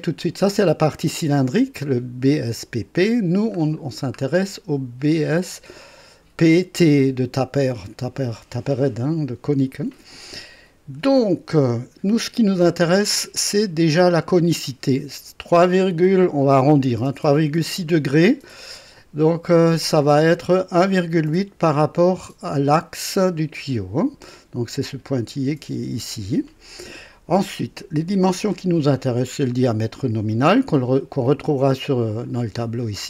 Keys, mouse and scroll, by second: 3.1-3.6 scroll down 2, 3.9-4.6 scroll down 4, 5.1 scroll down 2, 19.3 scroll down 2, 28.8 right click, 30.0 click, 31.5-31.9 scroll down 2, 32.4-32.9 scroll up 4.